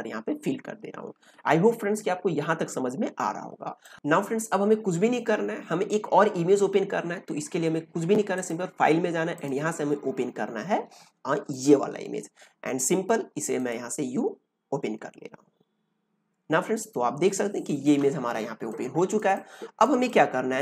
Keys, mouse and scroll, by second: 3.8 click, 8.3 click, 8.3 p, 16.7-18.4 drag, 16.7 p, 18.4 ctrl+space, 18.6 ctrl+click, 18.9 ctrl+space, 19.3 click, 19.7 space, 20.0-20.6 ctrl+drag.